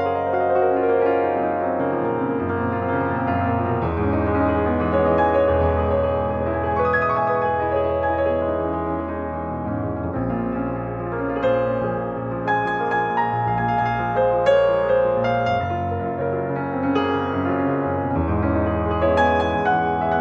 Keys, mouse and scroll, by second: 0.7 click, 1.9-3.5 drag, 3.8-4.2 scroll down 1, 4.2-6.5 middle drag, 6.5 ctrl+Tab, 9.1 click, 9.7 scroll down 1, 9.8 middle click, 10.6 click, 11.0 middle click, 11.6-12.0 scroll up 1, 12.0 click, 12.7 middle click, 12.9 scroll up 1, 13.2 click, 13.6 middle click, 14.5 click, 15.1 scroll up 1, 15.5 shift+middle click, 16.2 click, 16.7 click, 18.3-19.7 right drag, 19.7 click.